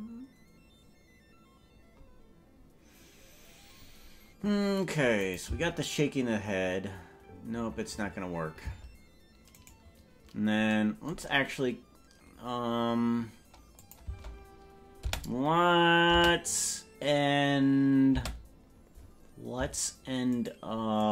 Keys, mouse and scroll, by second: 5.2 click, 5.4 space, 8.8 space, 9.8 right click, 13.8 click, 14.2 space, 15.2 space, 16.2 space, 18.2 space, 20.4 shift+right click.